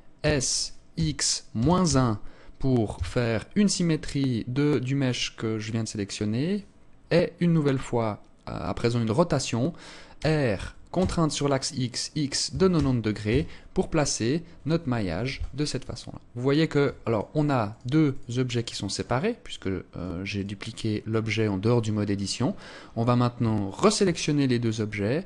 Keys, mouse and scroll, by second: 9.6 r, 14.5 z, 15.4 alt+click, 16.5 right click, 17.1 right click, 17.5 right click, 18.0 right click, 18.4 right click, 18.9 right click, 19.3 right click, 19.8 right click, 20.1 right click, 20.7 right click, 21.0 right click, 21.6 right click, 23.2 shift+right click.